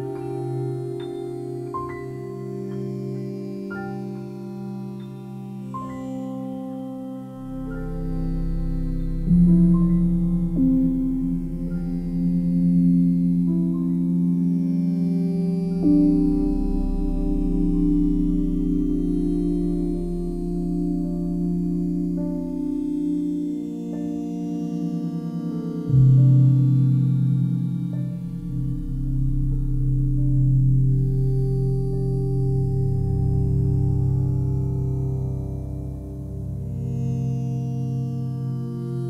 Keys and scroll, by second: 22.5 c, 35.6 ctrl+z, 36.6 ctrl+z, 36.9 ctrl+z, 37.0 ctrl+z.